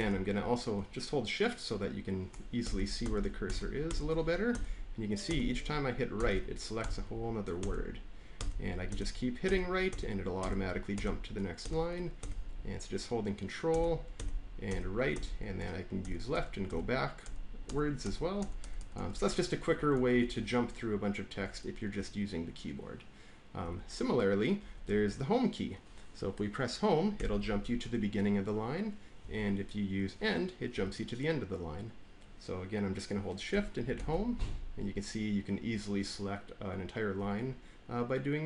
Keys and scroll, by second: 2.5 ctrl+shift+Right, 15.9 ctrl+shift+Left, 23.5 Down, 24.7 Left, 24.8 Left, 27.1 Home, 29.1 Down, 30.6 End, 33.9 Home.